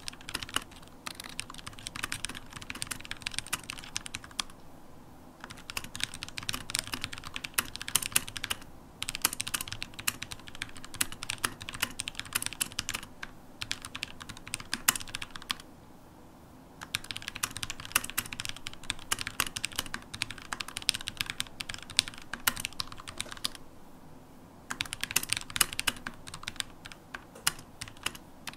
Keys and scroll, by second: 6.0-7.3 typing, 21.1-23.5 typing, 27.2 Return.